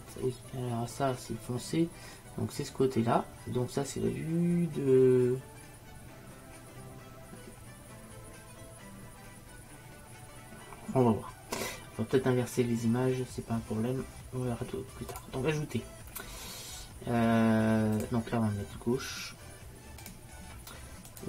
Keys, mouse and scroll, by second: 15.2-20.0 drag, 21.2 click.